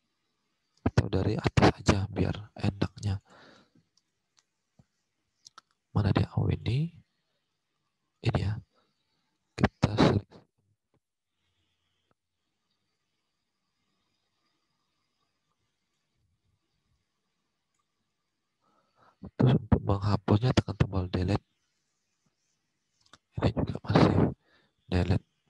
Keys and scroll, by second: 18.9 alt+Tab, 19.4 alt+Tab, 20.9 Delete.